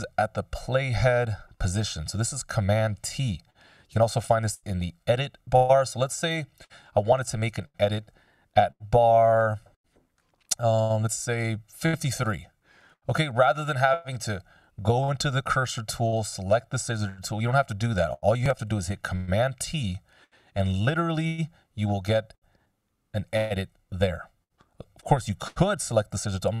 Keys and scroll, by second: 19.6 super+t, 21.8 BackSpace, 23.8 super+z, 26.0 s.